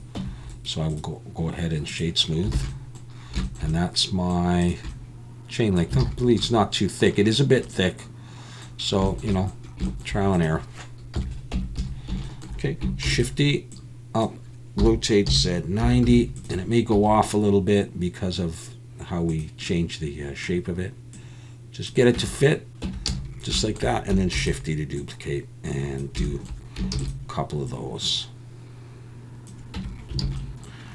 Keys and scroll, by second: 0.2 Tab, 2.5 alt+a, 6.0 alt+a, 11.1 KP_1, 11.5 Tab, 11.8 a, 13.1 shift+d, 14.8-16.9 typing, 22.2 Tab, 22.9 Tab, 23.1 a, 24.3 shift+d, 26.9 shift+d, 29.8 Tab, 30.2 alt+a.